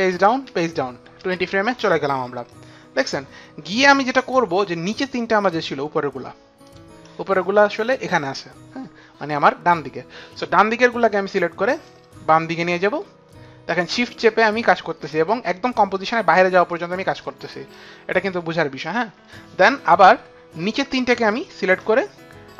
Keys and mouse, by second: 0.0 shift+Page_Down, 0.5 shift+Page_Down, 4.1 click, 5.4 click, 6.6 shift+click, 11.9 click, 19.9 click, 21.2 shift+click.